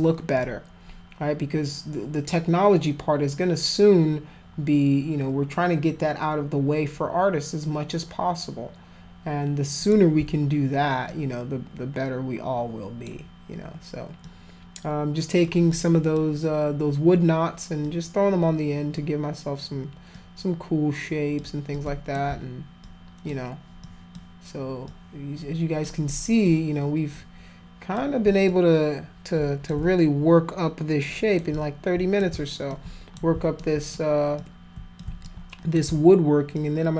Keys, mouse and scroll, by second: 0.4 click, 9.8 click, 11.1-13.1 alt+drag, 14.2-15.4 alt+drag, 15.7 alt+click, 17.8-18.9 alt+drag, 20.1-21.4 alt+drag, 21.7 alt+click, 22.8 alt+click, 23.8 alt+click, 24.9 alt+click, 26.1 alt+click, 27.1 alt+click, 28.5-29.7 drag, 31.1 alt+click, 31.5 click, 32.7 alt+click, 33.6 alt+click, 34.4 click, 35.2 alt+click, 36.5 alt+click.